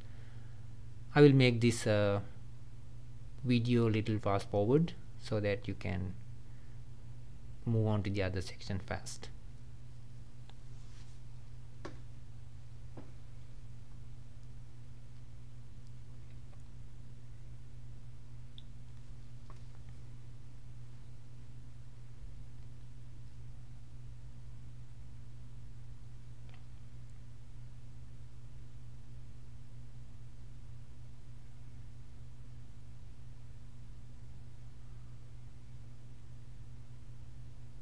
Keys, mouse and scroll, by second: 0.5 e, 1.7-3.1 middle drag, 3.1 s, 5.0 g, 7.0 middle click, 7.9-8.3 scroll up 1, 8.3-10.0 middle drag, 10.0 e, 10.4 s, 11.3 g, 11.7 click, 11.8 middle click, 12.1 scroll up 1, 12.2 middle click, 13.1-13.4 scroll up 1, 13.4 click, 13.7-16.9 typing, 13.8 click, 14.5 middle click, 14.8 click, 15.5 click, 15.9 click, 16.3 middle click, 16.4 scroll up 1, 16.7 click, 17.2 middle click, 17.7 click, 17.9 click, 18.1 shift+click, 18.2 shift+click, 18.3 shift+click, 18.4 shift+click, 18.5 shift+click, 18.6 shift+click, 18.7 shift+click, 18.9 middle click, 19.4-28.3 typing, 20.7 middle click, 20.8 scroll down 2, 22.4 middle click, 23.2 middle click, 25.5 middle click, 26.5 middle click, 27.1 middle click, 27.3-27.6 scroll up 1, 28.9 middle click, 29.0 click, 29.1 middle click, 29.8 scroll up 3, 30.2 click, 30.5 click, 31.0 click, 31.2 shift+click, 31.5 g, 31.9 middle click, 32.3 click, 32.5 g, 33.0 click, 33.2 shift+click, 33.4 g, 33.7 middle click, 34.2 click, 34.5 click, 34.6 shift+click, 34.8 shift+click, 34.8 middle click, 35.1 shift+click, 35.2 middle click, 35.3-35.6 scroll down 2, 35.6-37.8 typing, 36.6 scroll up 1, 36.6 middle click.